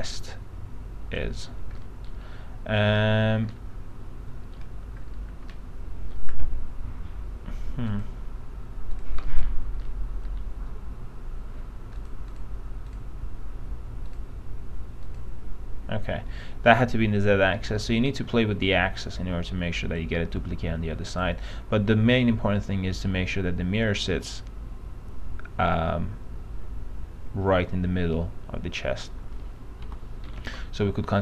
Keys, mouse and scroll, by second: 2.0 middle click, 2.2-3.2 scroll down 2, 3.7 middle click, 4.7-5.2 scroll down 1, 5.2-5.7 scroll up 1, 5.7 middle click, 6.6-8.1 scroll down 1, 8.1 click, 9.4 middle click, 12.2 click, 18.0 middle click, 18.2-18.5 scroll up 1, 20.1-21.7 drag, 30.0 p, 30.4 middle click, 30.8 alt+middle click.